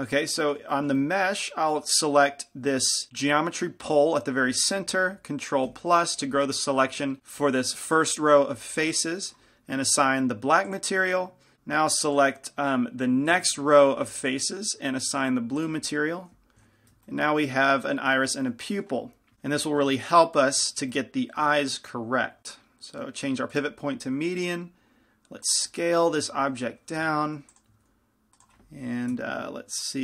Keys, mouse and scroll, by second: 0.6-4.1 middle drag, 4.1-5.9 drag, 5.9 ctrl+KP_Add, 10.9-17.6 drag, 16.8 Tab, 17.6-23.7 middle drag, 22.4 s, 23.7-25.6 drag, 24.3 s, 25.9-27.6 drag, 26.3 z, 27.2 g, 27.9-30.0 drag, 27.9 s, 29.3 ctrl+KP_1.